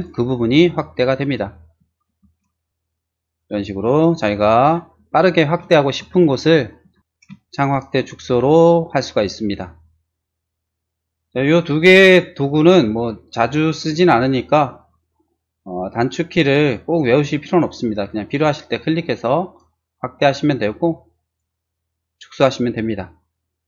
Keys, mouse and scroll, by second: 2.1 shift+z, 2.9 ctrl+shift+click, 4.8 ctrl+shift+middle click, 6.8 ctrl+z, 7.0 middle click, 7.5 middle click, 18.4 click, 19.3 click, 21.3 click.